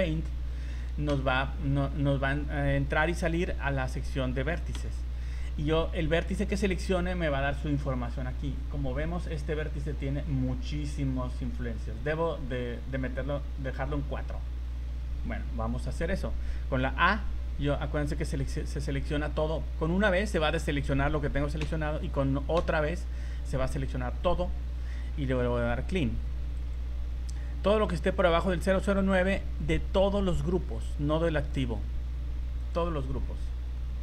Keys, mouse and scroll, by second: 1.1 v, 4.8 v, 5.4 v, 5.8 v, 6.6 right click, 8.2-8.9 scroll down 9, 8.9-10.3 scroll up 14, 11.1-11.4 scroll down 2, 11.7-12.2 scroll up 3, 21.6 a, 22.6 a, 25.1-25.8 scroll down 7, 26.5 click, 31.5 click.